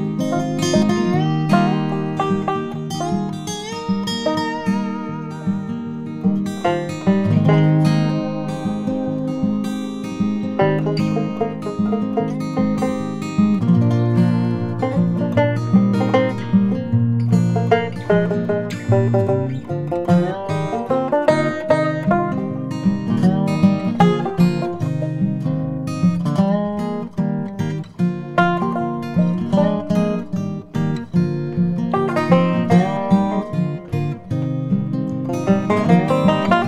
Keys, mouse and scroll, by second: 5.7 click, 7.6 click, 8.0 middle click, 9.6 click, 13.6 middle click, 15.0 click, 16.6-19.4 drag, 21.3 click, 21.6 middle click, 22.3 Tab, 23.0 middle click, 25.8 KP_3, 28.3 e.